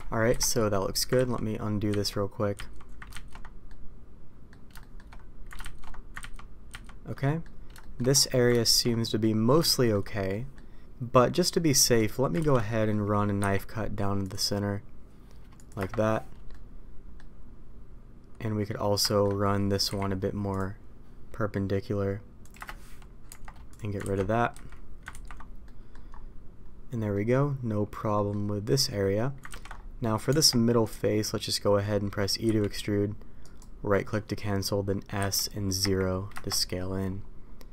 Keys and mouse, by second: 0.2 KP_5, 1.1 ctrl+z, 3.1 ctrl+shift+z, 3.6-4.4 middle drag, 4.7 shift+middle click, 6.4 ctrl+z, 7.2 middle click, 7.7 shift+middle click, 8.6 ctrl+shift+z, 9.0 middle click, 9.6 shift+middle click, 10.2 middle click, 11.5 middle click, 12.4 ctrl+z, 12.6 middle click, 13.3 k, 16.4-17.1 middle drag, 19.0 shift+middle drag, 19.8 k, 23.2 Tab, 24.0 ctrl+x, 24.5 a, 25.1 ctrl+t, 25.6 middle click, 27.1 middle click, 28.1 middle click, 28.6 middle click, 29.5 ctrl+z, 30.2 Tab, 32.4 e, 35.2 s.